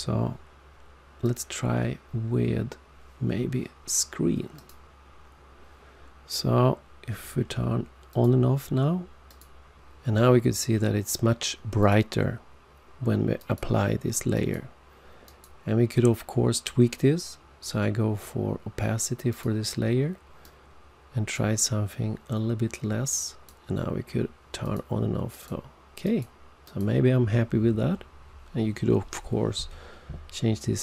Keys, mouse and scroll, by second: 1.2 click, 4.5 click, 8.0 click, 9.3 click, 11.7 click, 13.3 click, 14.3 click, 15.2 click, 19.2 click, 20.4 click, 23.1 click, 24.6 click, 25.2 click, 26.0 click, 26.6 click.